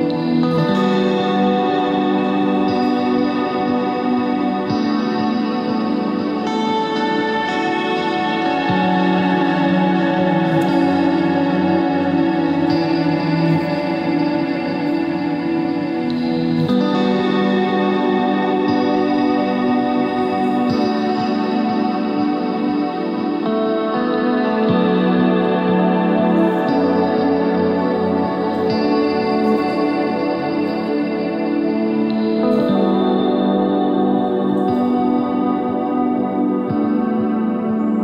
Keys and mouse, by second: 2.7 KP_1, 3.2 z, 5.0 Tab, 5.7 ctrl+Tab, 6.1 z, 6.4 z, 6.6 c, 8.4 z, 9.4 Tab, 13.6 middle click, 13.6 KP_3, 14.0 Tab, 14.4 z, 14.6 c, 16.6 Tab, 17.2 z, 18.6 Tab, 19.3 right click, 20.9 s, 21.5 middle click, 22.2 Tab, 24.3 Tab, 24.8 KP_3, 25.2 z, 25.5 c, 27.1 z, 27.6 s, 32.3 right click, 33.4-35.7 middle drag, 35.9 middle click.